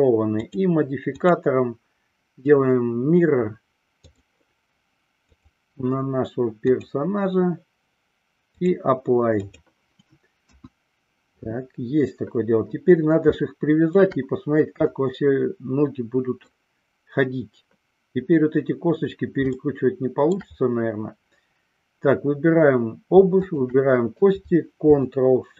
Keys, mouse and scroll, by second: 0.5 click, 1.3-4.4 drag, 5.5 click, 8.7-9.9 drag, 10.7 KP_1, 13.5-14.1 shift+middle drag, 15.0-16.7 middle drag, 19.6-20.6 shift+middle drag, 23.6 shift+click.